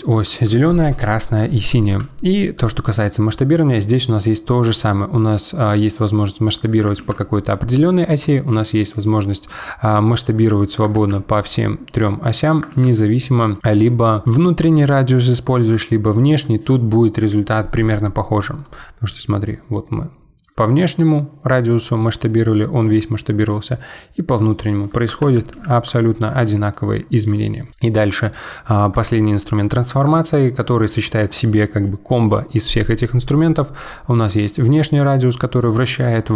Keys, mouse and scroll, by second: 2.5-5.6 drag, 5.9 click, 7.0 ctrl+z, 9.5 click, 10.9 ctrl+z, 11.6 click, 12.7 ctrl+z, 18.6 click, 20.8-21.3 middle drag, 21.3-21.6 scroll down 7, 21.8-23.7 middle drag, 23.7 click, 25.2 ctrl+z, 25.5 ctrl+z, 26.7 click, 28.9-30.2 drag, 30.2-33.2 shift+middle drag, 34.1 click.